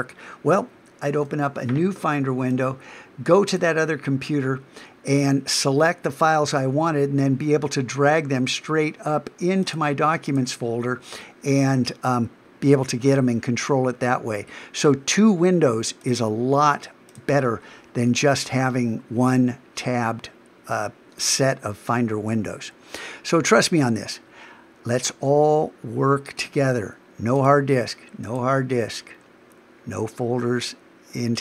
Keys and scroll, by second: 1.2 super+n.